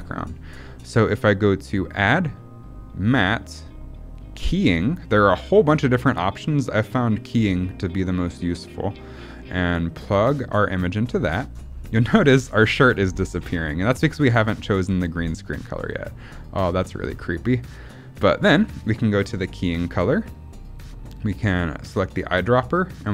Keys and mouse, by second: 0.9 middle click, 1.7-10.0 drag, 12.0 middle click, 13.5 middle click, 14.4 middle click, 15.0 middle click, 16.0 middle click, 17.5 middle click, 19.5 click.